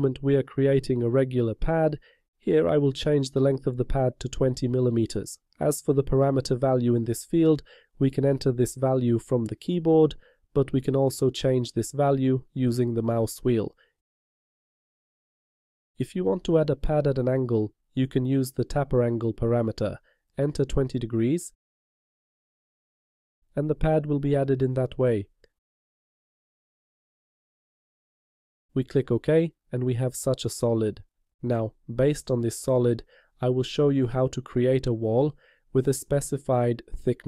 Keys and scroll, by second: 21.0 2.